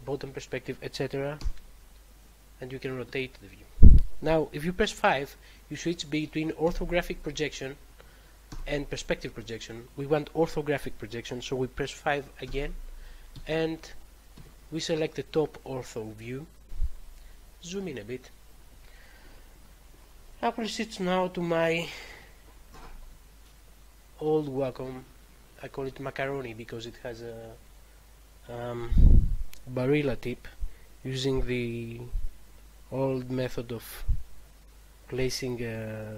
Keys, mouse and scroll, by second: 1.3 4, 2.9 6, 6.5 5, 8.4 5, 12.4 5, 13.2 1, 14.2 7, 17.7-18.9 scroll up 1.